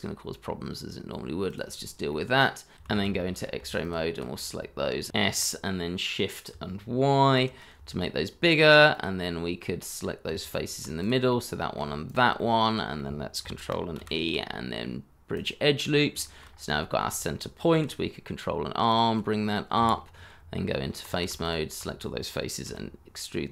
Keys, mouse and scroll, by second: 2.0 middle click, 2.8 shift+z, 3.1 middle click, 3.8 alt+click, 4.3 middle click, 5.1 s, 7.3 shift+y, 10.2 Tab, 11.2 middle click, 12.0 shift+click, 12.3 middle click, 13.9 ctrl+e, 15.8-16.1 scroll down 1, 16.2 shift+middle click, 16.4 scroll up 1, 17.7 ctrl+r, 18.0 ctrl+scroll up 2, 18.5-18.9 scroll down 1, 19.7 Escape, 20.3 Tab, 21.4 alt+click, 22.6 e.